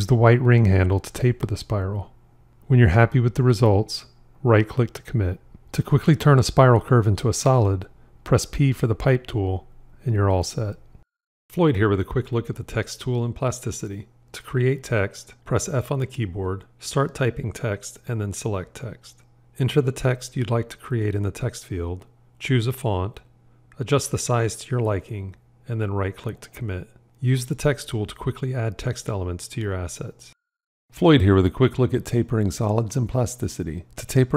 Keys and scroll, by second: 6.9 p, 15.3 f.